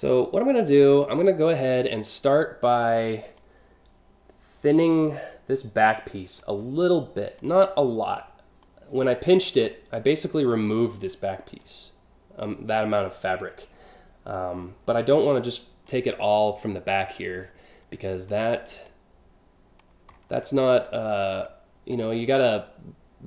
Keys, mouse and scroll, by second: 3.0-6.0 drag, 7.0-8.3 drag, 8.9-9.4 scroll down 4, 10.0 click, 11.0 scroll down 1, 12.6-14.0 drag, 14.9 click, 15.5-16.7 drag, 18.0 click, 18.5 click, 19.7-20.2 scroll up 4, 21.0 click, 21.5-23.1 drag.